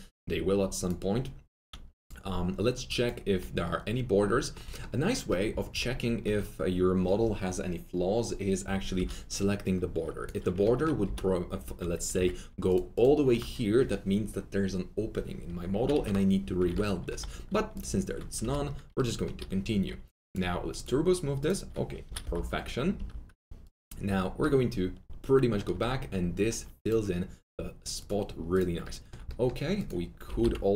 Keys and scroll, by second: 10.5 F3, 11.0 alt+s, 12.1 ctrl+2, 15.7 ctrl+z, 17.2 alt+2, 18.4 F3, 22.0 F3, 22.1 F3, 22.3 F4, 22.9 F4, 24.4 F3, 24.4 F4, 30.0-30.7 typing.